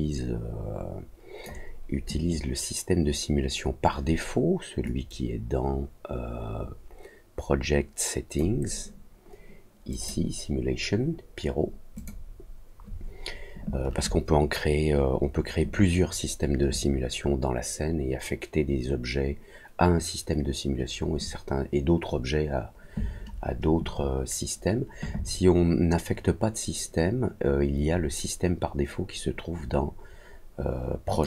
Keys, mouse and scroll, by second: 4.8-8.3 drag, 9.9 click, 11.9 click, 31.1 click.